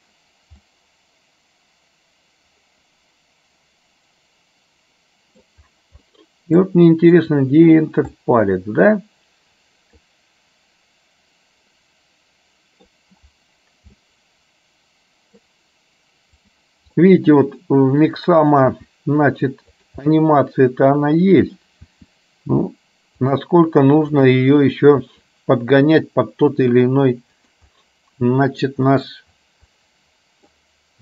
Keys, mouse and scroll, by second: 0.8-5.6 middle drag, 6.2 middle click, 8.2-12.9 middle drag, 14.1-15.6 middle drag, 16.6 click, 17.1-18.3 middle drag, 18.9 r, 20.2-21.7 middle drag, 21.9 r, 24.2 click, 25.2 r, 27.9 middle click, 28.9 middle click, 29.8 middle click.